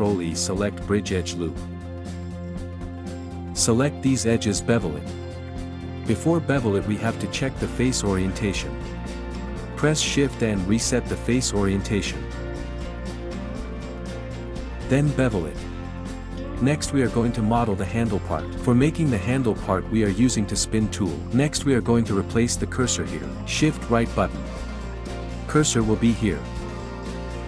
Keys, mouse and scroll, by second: 0.5 ctrl+e, 2.6 scroll down 2, 2.7 middle click, 2.9 click, 3.7 middle click, 4.3 Tab, 4.7 a, 5.1 a, 6.1 shift+n, 6.6 middle click, 7.4 2, 8.0 ctrl+middle click, 8.7 click, 9.1 alt+shift+click, 9.3 alt+shift+click, 9.8 alt+shift+click, 10.3 z, 11.4-13.4 drag, 13.6 click, 13.9 middle click, 16.8 shift+right click, 17.4 click, 17.8 click, 21.0 click, 23.1 middle click, 23.6 click, 24.2 middle click, 24.8 KP_1, 26.9-27.4 drag.